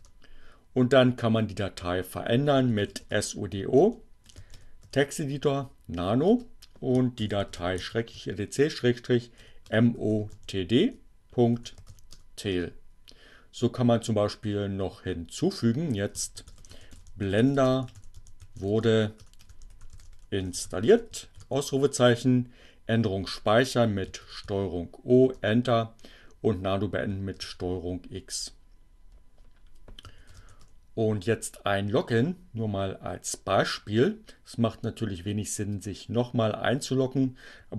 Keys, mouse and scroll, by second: 1.9-5.2 typing, 7.0-12.6 typing, 15.1 shift+b, 16.4-21.4 typing, 22.8 ctrl+o, 25.1 Return, 25.9 ctrl+x, 28.0 s, 30.0-30.8 typing.